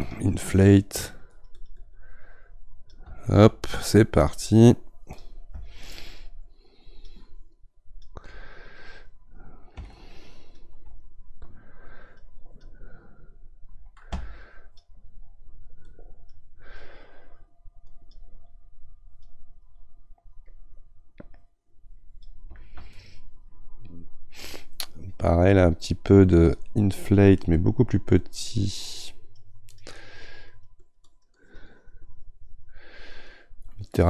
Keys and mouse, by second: 22.9-26.5 middle drag, 26.5-28.3 drag, 28.3-30.5 right drag, 30.5-34.0 drag.